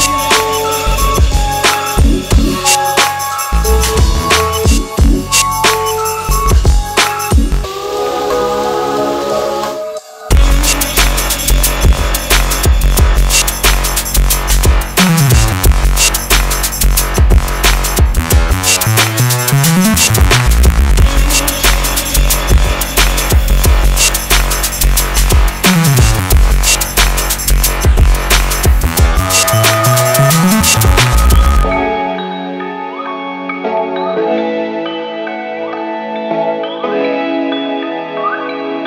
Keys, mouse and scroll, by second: 0.6 click, 2.4 ctrl+t, 3.7-5.9 click, 6.6-7.3 click, 9.8-11.6 click, 22.8 click, 23.1-24.8 scroll up 1, 28.5 click, 30.4 click, 34.1 click, 37.2-38.8 drag.